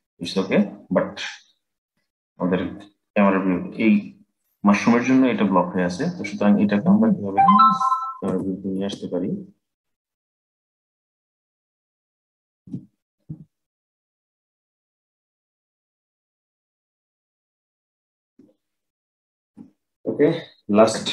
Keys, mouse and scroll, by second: 1.6 click, 8.0 g, 12.3 g, 15.5 click.